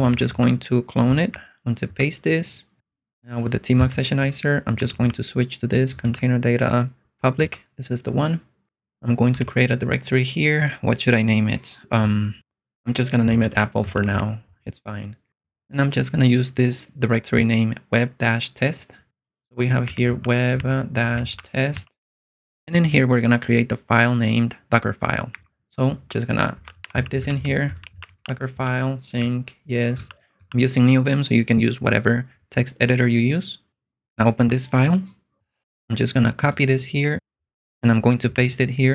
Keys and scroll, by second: 0.0-0.7 typing, 1.5 super+v, 2.0 Return, 4.1-5.6 typing, 6.1 Up, 7.5 Return, 9.4 o, 13.2-14.7 typing, 19.6-22.2 typing, 25.3 super+Tab, 26.4-30.1 typing, 34.5 Return, 37.1 super+Tab, 38.3 p.